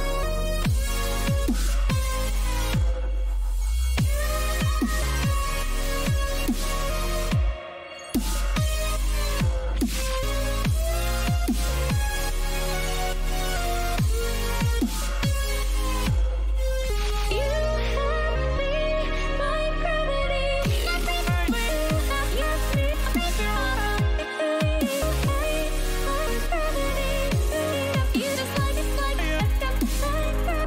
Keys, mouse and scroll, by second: 12.0-17.0 middle drag, 13.7 z, 14.2 a, 14.6 a, 17.1 ctrl+r, 24.2-26.2 middle drag.